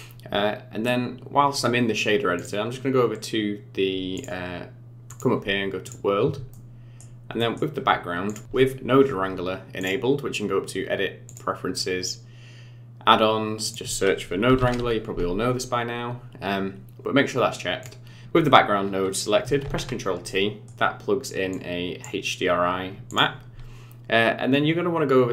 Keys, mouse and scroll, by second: 2.3 click, 4.1 click, 5.0 click, 6.5 middle click, 7.3 middle click, 8.2 click, 9.7 click, 18.2 ctrl+shift+t, 19.7 ctrl+t, 20.2 middle click, 21.5 click, 23.0 click.